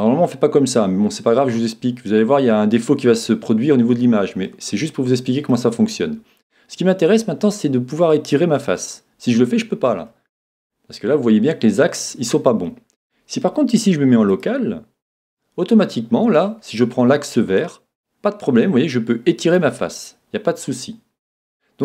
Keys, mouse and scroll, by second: 4.5-6.3 middle drag, 10.1-11.9 middle drag, 12.7-14.5 middle drag, 14.3 click, 15.9-17.9 middle drag, 17.6 click, 20.0-21.8 middle drag.